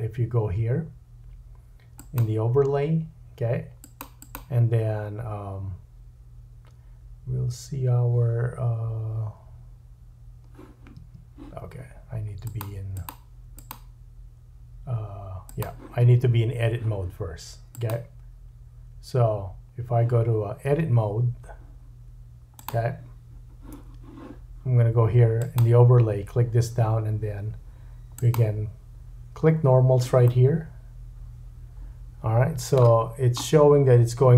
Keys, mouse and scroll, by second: 4.2-15.6 drag, 11.0 Tab, 15.6-17.7 middle drag, 16.1 Tab, 17.7-22.7 drag, 20.7 Tab, 22.7-25.4 middle drag, 25.4-34.3 drag, 30.2 middle click, 33.1 scroll up 1.